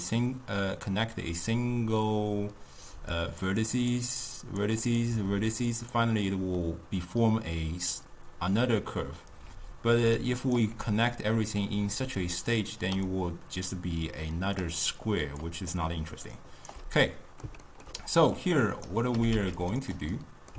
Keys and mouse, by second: 3.0-10.7 typing, 3.2 click, 3.7 click, 4.5 click, 4.9 click, 5.4 click, 5.8 click, 10.2 right click, 12.9 d, 13.2-14.7 drag, 14.7-15.0 d, 15.1 click, 15.4 d, 15.8 right click, 16.8 d, 17.2-18.4 middle drag, 18.4 click, 19.2 g, 19.9 drag, 20.2-20.5 middle drag.